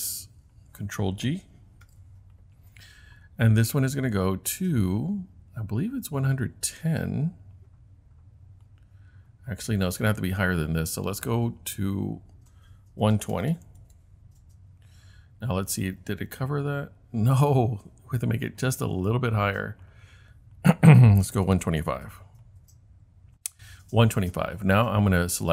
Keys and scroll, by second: 1.9 super+g, 12.9-14.1 typing, 21.0-22.1 typing.